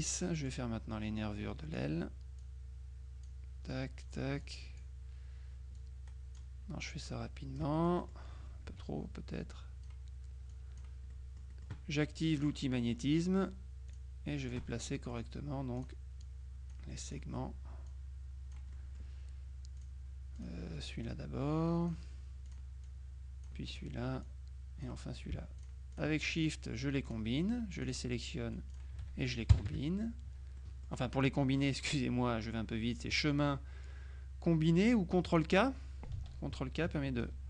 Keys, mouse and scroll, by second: 0.6-2.3 drag, 2.5-3.8 drag, 4.5 click, 5.9-7.0 drag, 7.2-8.7 drag, 7.8 right click, 8.8 F2, 9.6 click, 10.6 click, 11.6 middle click, 12.5 click, 14.0 click, 14.8 middle click, 15.9 click, 17.1 click, 18.0 click, 18.8 middle click, 19.8 click, 21.1-22.5 drag, 22.6 click, 23.8 click, 25.7 shift+click, 27.2 click, 27.9 click, 28.8 click, 29.6 KP_Subtract, 30.7 middle click, 33.2 click, 35.3 click.